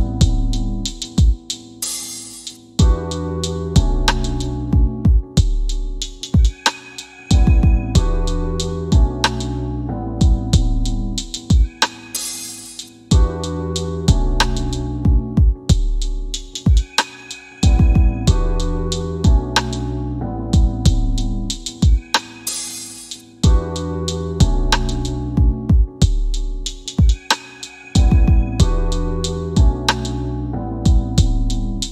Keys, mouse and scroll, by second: 1.5 q, 2.2 w, 4.0 click, 4.4 scroll up 1, 5.6 scroll down 1, 6.1 scroll up 1, 6.9 F4, 8.0 scroll down 1, 8.4 F3, 8.7 scroll down 1, 9.5 scroll up 1, 11.1 scroll down 1, 12.0 click, 12.8 scroll up 1, 14.7 scroll down 1, 15.3 scroll up 1, 16.4 middle click, 17.2 s, 18.0 click, 21.3 scroll down 1, 22.4 click, 22.8 alt+w, 26.3 f, 27.2 middle click.